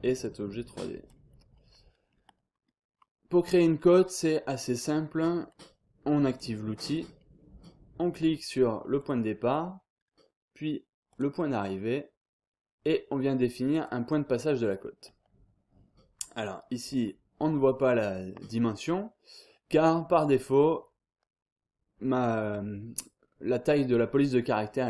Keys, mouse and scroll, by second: 0.2 click, 1.3 scroll down 1, 1.5-2.1 scroll up 1, 2.6-3.2 scroll up 1, 3.8 click, 4.2 scroll down 1, 4.5-5.1 scroll up 1, 6.3 click, 7.0 scroll down 1, 7.2-7.8 scroll up 1, 9.0 click, 11.1 click, 13.7 click, 16.2-16.9 scroll up 2, 16.9-17.5 scroll down 2, 18.2-18.7 scroll up 2, 19.7-20.2 scroll down 2, 20.2 click.